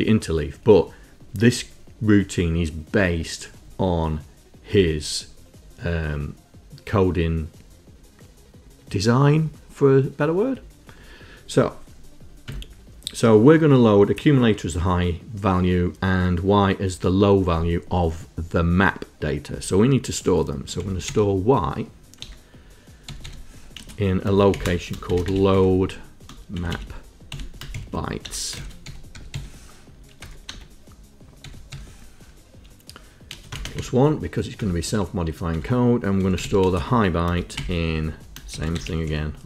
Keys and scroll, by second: 12.6 Tab, 20.8 s, 21.1 y, 22.2-31.8 typing, 33.4 space, 33.6 KP_Add, 33.8 KP_1, 34.6 Return, 35.6 Tab, 36.0-39.4 typing.